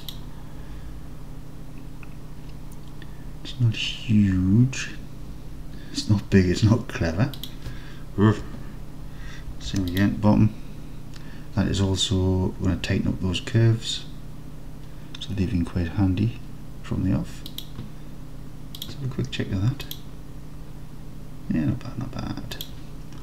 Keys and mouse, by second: 7.5 click, 9.6 ctrl+r, 17.6 click, 18.9-19.9 drag, 20.0-22.6 drag, 22.7 click.